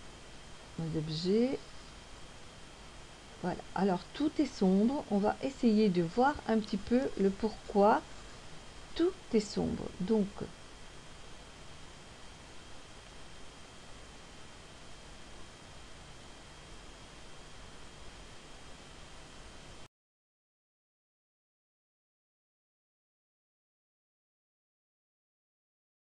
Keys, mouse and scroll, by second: 1.7 click, 2.9 click, 5.3-6.5 scroll down 3, 6.9-8.1 scroll up 2, 12.9 click.